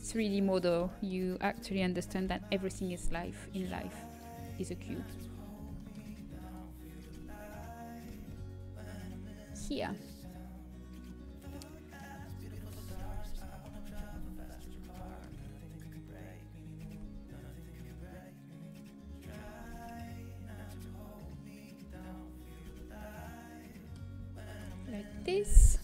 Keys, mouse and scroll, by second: 0.8-4.1 middle drag, 4.1 s, 5.9-9.5 middle drag, 6.9-9.5 drag, 6.9-9.5 right drag, 9.5 g, 11.0-12.7 middle drag, 12.7 ctrl+KP_Add, 14.6 ctrl+KP_Add, 14.6 KP_3, 17.4 g, 19.5 g, 22.7 z.